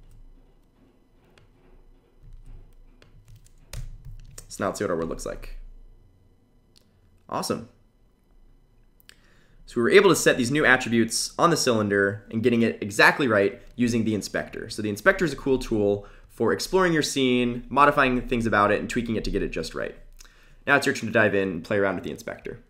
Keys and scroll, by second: 0.8 super+v, 2.0 super+v.